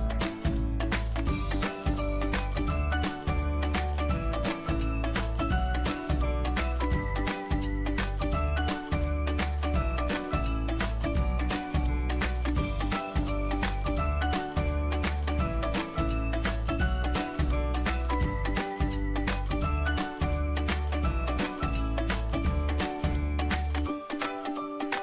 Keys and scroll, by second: 2.9 ctrl+g.